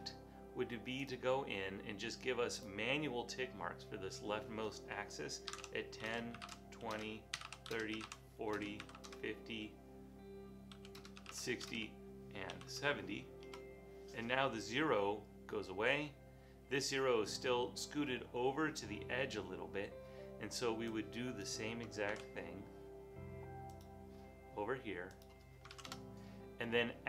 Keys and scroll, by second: 5.4-9.5 typing, 11.0-13.2 typing, 13.5 Return, 22.2 super+c, 25.8 super+v.